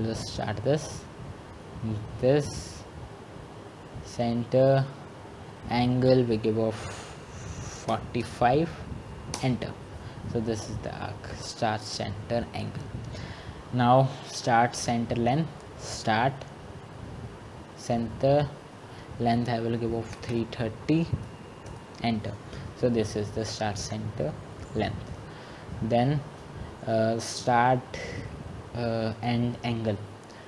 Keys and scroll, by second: 9.4-10.2 typing, 20.4 Return, 21.8-22.5 typing, 29.2-30.4 typing.